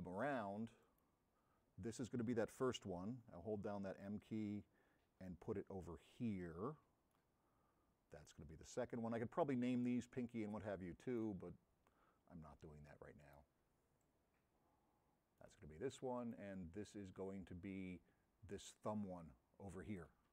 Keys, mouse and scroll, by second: 0.9 middle click, 3.5 m, 4.1-7.3 middle drag, 8.2 middle click, 9.0 m, 9.0-11.3 middle drag, 11.6-12.4 scroll down 1, 12.4 scroll up 1, 13.3-15.5 middle drag, 14.1 m, 16.2 middle click, 17.0-20.1 middle drag, 17.0 m.